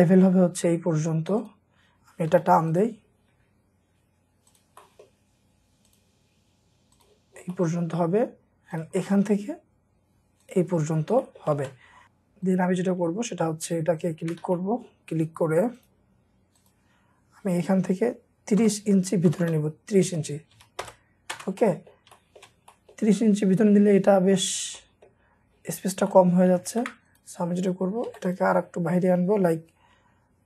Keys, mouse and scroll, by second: 0.9 scroll up 1, 2.3 typing, 3.0 scroll down 1, 3.4-4.2 scroll up 1, 4.8 middle click, 7.2 scroll down 1, 7.5 middle click, 8.2 scroll up 1, 9.0 middle click, 9.5-10.3 scroll up 1, 10.7 scroll down 1, 11.2 middle click, 11.6 space, 14.0 ctrl+click, 14.5 ctrl+middle click, 18.6-21.3 typing, 20.8 Return, 21.6 middle click, 26.7 ctrl+z, 28.3 typing.